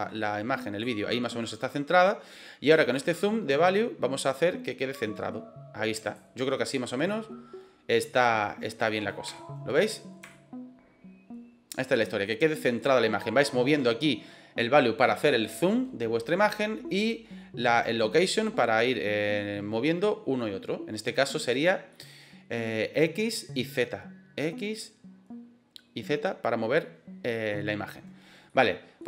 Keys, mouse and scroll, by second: 2.9-6.1 drag, 8.0-9.0 middle drag, 9.3 shift+middle click, 10.4-11.7 shift+middle drag, 21.8 middle click, 28.4 middle click.